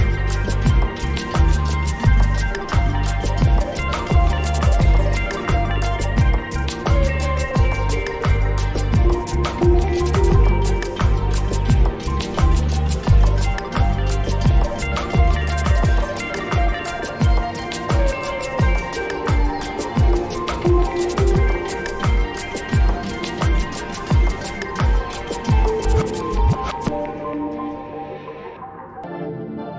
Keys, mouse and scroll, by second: 1.9 space, 2.1-3.7 drag, 5.8-6.3 scroll up 2, 6.7 scroll up 1, 7.5-8.2 scroll up 3, 8.7-9.5 scroll up 1, 10.2 click, 14.4-17.5 drag, 17.5 click, 22.3 click, 23.9 click, 27.2 click, 28.3 click.